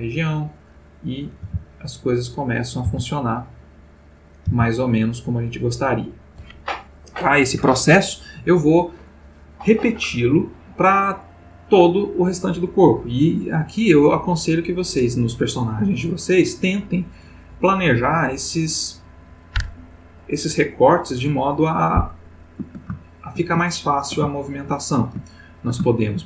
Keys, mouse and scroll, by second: 0.4 click, 1.1 click, 1.4 r, 2.2 click, 2.7 click, 2.9 r, 3.7 click, 4.3 click, 4.4 r, 5.1 click, 23.0-23.6 ctrl+shift+middle drag, 23.7-26.2 ctrl+shift+middle drag.